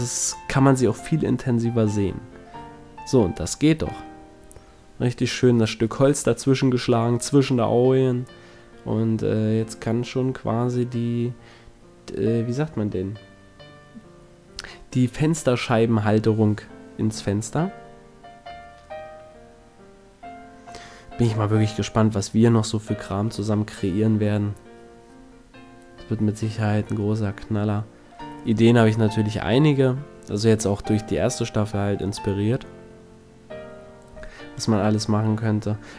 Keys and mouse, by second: 0.3-1.5 middle drag, 2.2 Tab, 3.2-4.5 middle drag, 10.1-11.6 middle drag, 17.7 Tab, 18.8 ctrl+Tab, 23.2 middle click, 23.8 e, 26.4 s, 29.1-31.2 drag, 29.3 e, 29.5-31.0 right drag, 35.8-35.9 right drag.